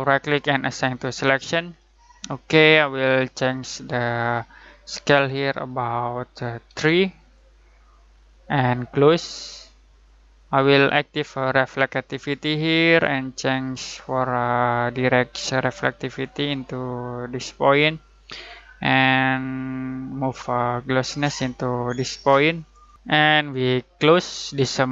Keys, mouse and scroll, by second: 0.0 right click, 0.9 click, 6.6 3, 7.2 click, 9.9 click, 14.0-22.9 drag, 24.7 click.